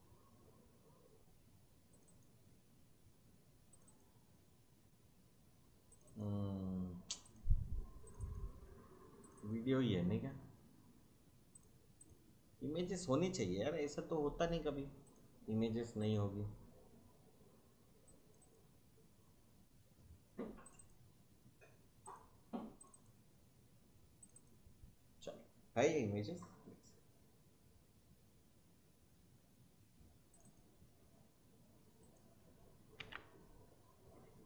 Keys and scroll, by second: 33.0 ctrl+c.